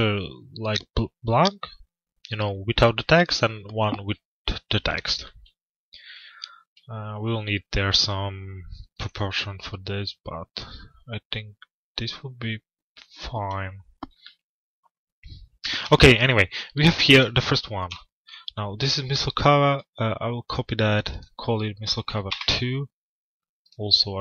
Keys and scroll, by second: 21.8 Return.